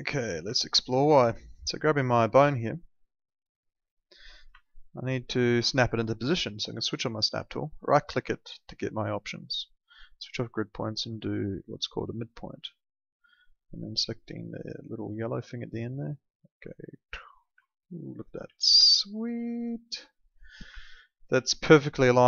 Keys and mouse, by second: 0.5 alt+middle click, 1.4 alt+middle click, 2.6 alt+middle click, 3.7 click, 4.6 alt+middle click, 6.9 click, 7.8 right click, 8.8 click, 16.0 click, 17.6 alt+middle click, 18.4 w, 18.9 alt+middle click, 20.5 click, 20.7 alt+middle click, 21.4 alt+middle click.